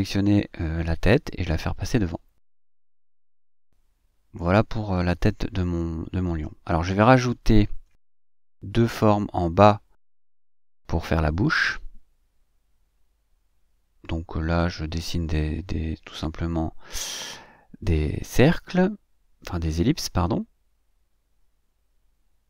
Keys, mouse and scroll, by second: 2.4 click, 3.6 click, 5.6 click, 6.5-8.4 drag, 8.4-13.8 middle drag, 17.1 middle click, 17.9 middle click, 19.0 middle click, 19.1 click, 21.1-22.4 drag.